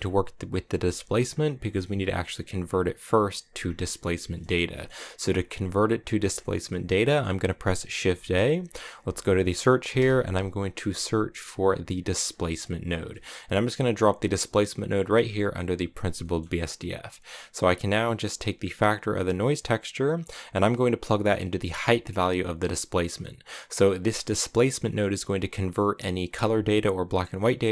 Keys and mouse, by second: 1.5 middle click, 3.9 middle click, 4.3 middle click, 4.7 middle click, 7.0 middle click, 7.9 shift+a, 16.2 middle click, 18.0 middle click, 20.0-22.6 drag, 23.1 middle click, 24.2 click.